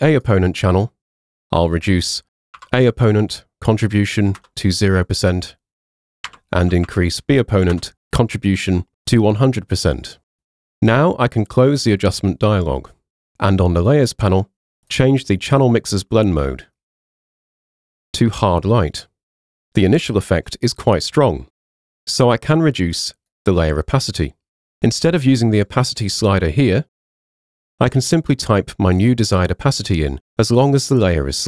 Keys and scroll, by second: 2.6 0, 4.4 Return, 6.3 1, 6.7 0, 7.8 Return.